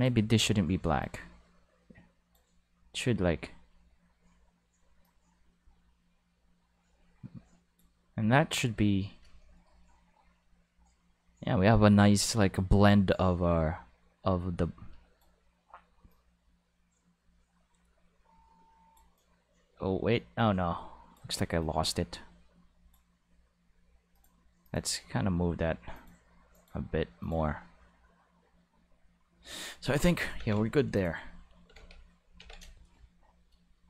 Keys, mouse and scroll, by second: 1.0-2.3 drag, 5.0-8.3 drag, 13.1-15.2 drag, 16.1-18.9 drag, 19.1-21.1 drag, 21.6-22.9 drag, 24.1 click, 24.6 click, 25.9 click, 26.5 click, 27.2 click, 30.0 ctrl+s, 30.4 ctrl+Tab, 30.9 click, 31.7 alt+a, 32.4 ctrl+s.